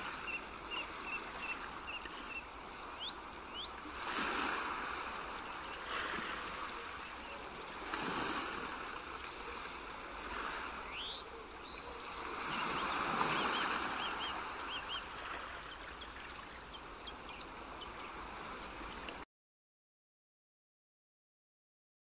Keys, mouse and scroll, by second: 2.8 middle click, 10.0 Tab, 11.4 click, 12.5 middle click, 16.5 click.